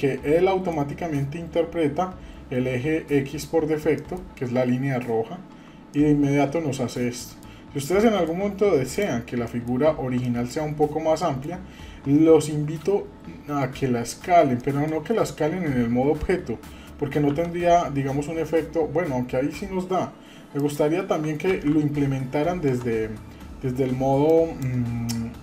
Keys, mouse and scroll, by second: 4.0 middle click, 5.9-7.4 middle drag, 7.6-7.9 scroll up 2, 8.0-8.4 shift+middle drag, 8.9 click, 9.5 middle click, 9.9 scroll up 1, 10.2-10.6 shift+middle drag, 10.6-10.9 scroll up 2, 11.2 shift+middle click, 11.5-12.0 scroll down 3, 14.1-14.5 scroll down 2, 14.6 middle click, 17.3 s, 21.5 ctrl+z, 21.8 scroll up 1, 22.7 Tab, 23.4 scroll up 2, 24.3 click.